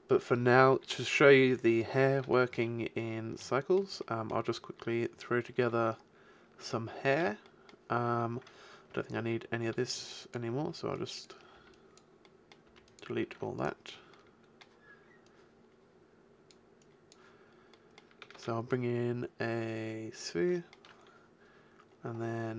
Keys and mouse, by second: 2.3-4.2 middle drag, 4.5 middle click, 6.5 middle click, 8.9 a, 9.6 b, 10.6 b, 11.6 b, 12.7 b, 13.3 x, 15.3 click, 16.1 click, 17.4 middle click, 18.3 shift+a.